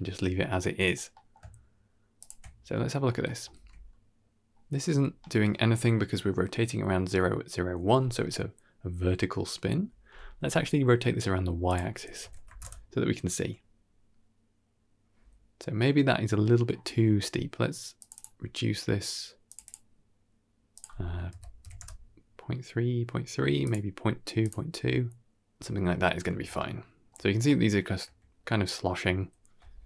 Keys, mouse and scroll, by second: 0.2 scroll down 2, 0.5 middle click, 1.0 middle click, 2.1 ctrl+shift+click, 2.6 middle click, 3.1 shift+middle click, 3.4 shift+space, 4.7-5.4 scroll up 4, 5.1 middle click, 11.5 click, 16.0 middle click, 16.5-17.9 scroll up 1, 17.9 click, 17.9 scroll up 1, 18.0 click, 19.3 click, 19.5 click, 20.6-21.7 drag, 23.5 click, 24.3 click, 26.2 scroll down 2, 26.5-27.0 shift+middle drag, 27.2 scroll down 2, 27.3-27.8 middle drag.